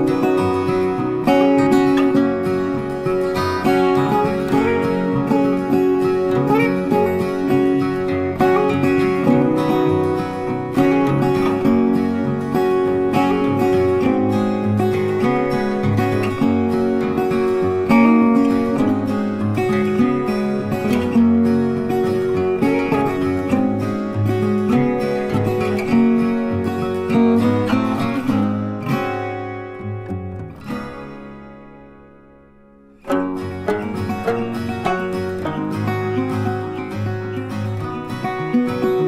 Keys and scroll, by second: 31.1 ctrl+t.